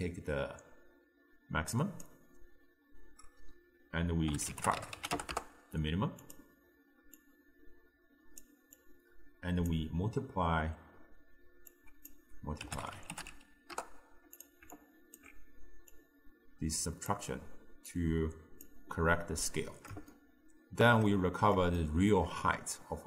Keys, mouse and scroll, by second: 7.2 click, 8.8 click, 11.8 drag, 14.8 alt+click, 16.0 drag, 17.9 click, 19.5-23.0 middle drag.